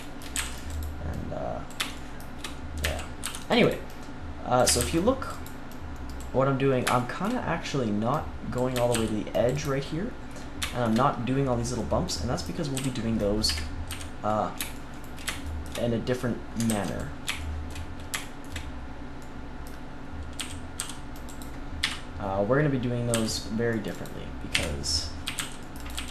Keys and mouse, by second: 0.3-1.6 drag, 0.3 a, 0.3 c, 1.9 click, 2.8 a, 3.2 c, 4.5 click, 4.6 a, 4.7 click, 4.7 c, 8.1 click, 8.7 a, 8.9 c, 9.9 middle click, 12.7 z, 13.4 KP_1, 13.8 z, 16.6 ctrl+s, 20.3 z, 20.7 c, 21.7 KP_3, 23.0 c, 24.5-26.1 typing.